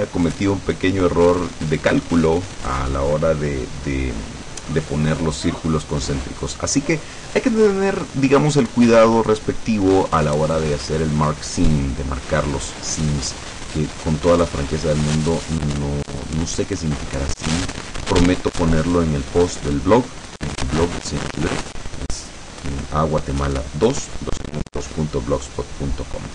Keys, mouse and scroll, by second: 4.8-7.0 middle drag, 17.1 click.